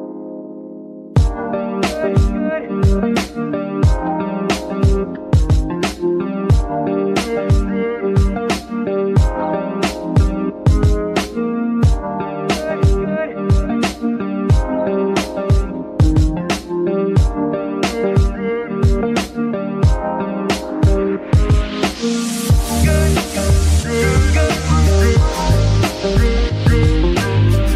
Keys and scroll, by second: 3.1 ctrl+r, 15.2 ctrl+s, 22.5 Tab, 24.4 shift+s, 25.9 Tab, 26.5 shift+s, 27.5 KP_1.